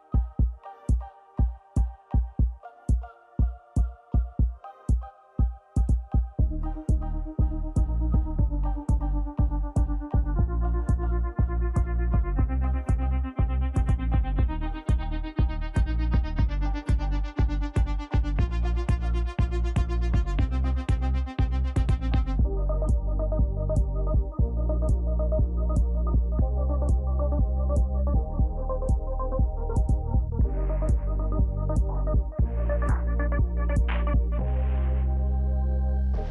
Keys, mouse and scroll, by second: 0.1 Return, 0.4 w, 3.5 ctrl+click, 4.6 ctrl+j, 4.6 ctrl+j, 5.0 ctrl+click, 6.7 double click, 7.0 a, 7.2 Return, 7.3 a, 7.6 Return, 12.1 ctrl+j, 12.3 ctrl+j, 14.7 double click, 15.3 l, 15.7 Return, 15.8 l, 15.9 Return, 18.1 ctrl+j, 20.2 double click, 20.9 k, 21.0 Return, 23.2 ctrl+j, 25.5 Right, 25.7 Right, 25.8 Right, 26.0 Right, 26.6 double click, 27.1 Return, 27.1 o, 27.5 BackSpace, 27.9 BackSpace, 28.1 i, 28.2 Return, 30.0 Left, 30.1-31.2 Left, 32.2 ctrl+j, 32.4 ctrl+j, 35.0 double click, 35.6 n, 35.7 Return, 35.8 n, 36.0 n, 36.0 Return.